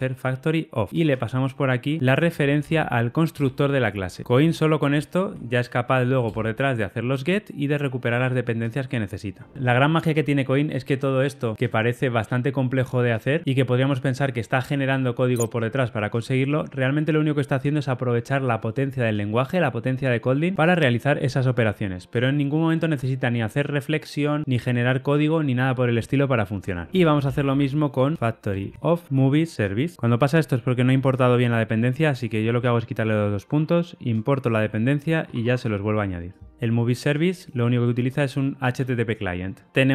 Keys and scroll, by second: 3.3 Return, 5.3 Escape, 6.4 alt+Return, 8.0 alt+Return, 29.9 super+z, 33.7 alt+Return, 36.4 super+b.